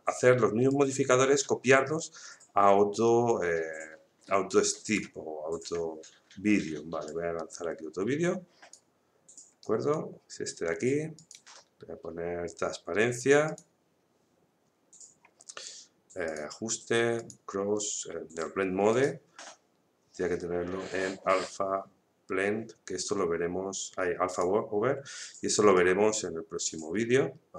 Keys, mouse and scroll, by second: 0.7-9.6 drag, 9.6-11.1 right drag, 11.1 click, 13.4 click, 16.2 click, 24.3-27.5 drag.